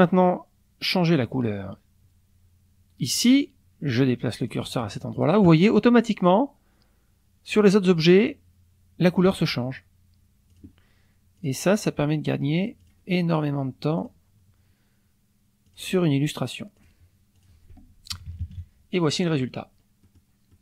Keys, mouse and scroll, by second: 4.4 click, 10.5 click, 11.4 click, 12.8 click, 14.0 click, 15.7 click, 16.8 click, 17.4 click, 18.1 KP_Subtract, 19.3 click, 20.0 click.